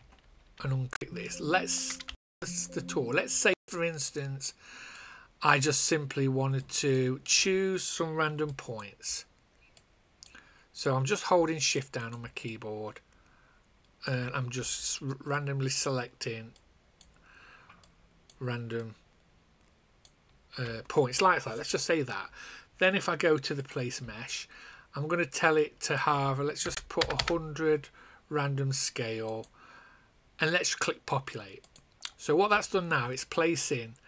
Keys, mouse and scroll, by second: 0.1 ctrl+z, 2.0 space, 4.0 click, 8.4 shift+click, 9.0 shift+click, 11.7 shift+click, 12.3 shift+click, 15.3 shift+click, 15.9 shift+click, 16.5 shift+click, 17.2 shift+click, 18.7 shift+click, 23.5 click, 26.6 KP_1, 26.9 KP_0, 29.3 click.